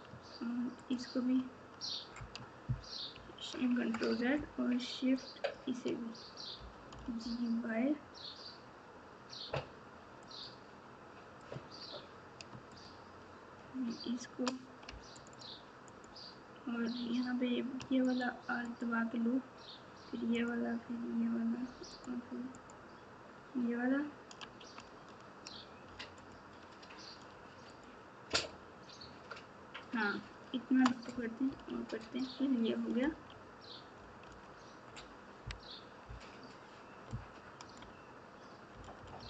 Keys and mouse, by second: 0.8 ctrl+click, 3.1 ctrl+z, 5.2 click, 12.7 shift+click, 15.1 alt+click, 15.9 alt+click, 18.6 alt+shift+click, 20.3 alt+shift+click, 21.9 alt+shift+click, 26.1 alt+shift+click, 28.3 shift+click, 32.1 click, 33.0 z, 34.2 alt+z, 36.0 KP_4, 37.1 KP_Subtract, 37.6 KP_Subtract, 37.6 KP_Subtract, 37.7 KP_Subtract, 38.7 KP_Subtract, 38.9 KP_Subtract, 39.2 KP_Subtract.